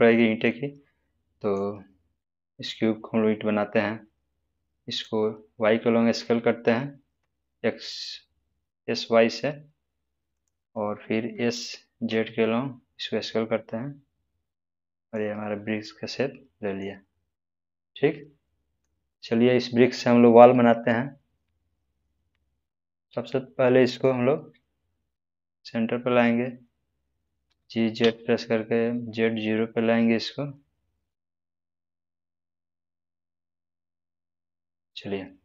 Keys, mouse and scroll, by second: 6.1 s, 6.6 y, 10.3 click, 11.3 s, 12.0 z, 15.1 click, 15.4-16.9 middle drag, 17.0-17.8 scroll up 1, 17.9-18.8 middle drag, 23.9 click, 27.4 click, 28.0 z, 33.1 click.